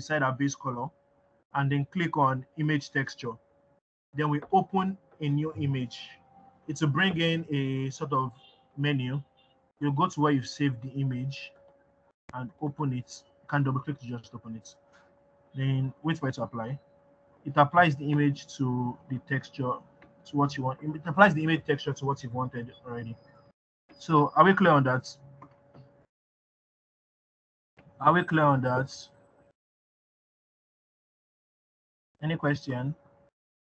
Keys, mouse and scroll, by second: 1.9 click, 20.1 middle click, 20.1-21.1 scroll down 2, 21.1 scroll up 1, 22.2 middle click, 22.7-26.8 scroll down 2, 26.8 middle click, 26.8-28.0 scroll down 2, 29.5-33.7 middle drag, 29.5-31.1 scroll down 1.